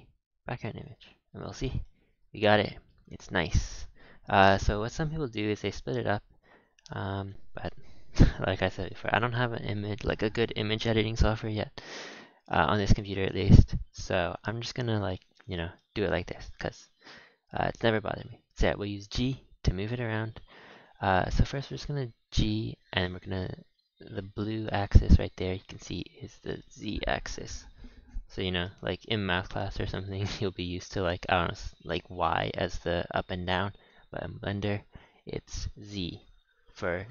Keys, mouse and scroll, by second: 0.3-0.7 scroll down 3, 0.7 scroll up 6, 1.2-1.6 shift+middle drag, 1.8-2.1 shift+middle drag, 2.1 scroll down 1, 2.2 scroll, 2.3-3.0 scroll down 10, 2.6 shift+middle drag, 3.3-6.4 shift+middle drag, 12.1-12.5 scroll up 2, 12.5-13.0 shift+middle drag, 13.0 scroll up 2, 13.3-14.5 shift+middle drag, 14.5 scroll down 1, 15.5-15.9 shift+middle drag, 15.9 z, 16.5 g, 18.8 g, 21.2 shift+middle click, 21.7 g, 23.1-23.4 scroll down 4, 28.6-30.7 middle drag, 30.7-32.3 scroll down 5, 32.3-33.9 middle drag, 33.9 KP_1, 34.9-36.4 scroll up 3, 36.6-37.1 scroll up 4.